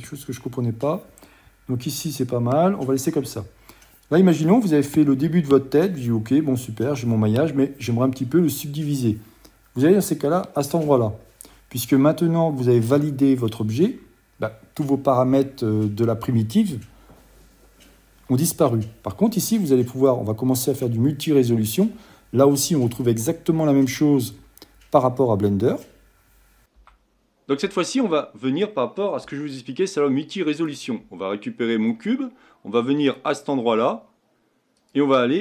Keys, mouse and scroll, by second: 27.2 n, 28.1-30.8 middle drag, 30.8 click, 31.7-33.3 middle drag, 33.3 click, 35.0 click.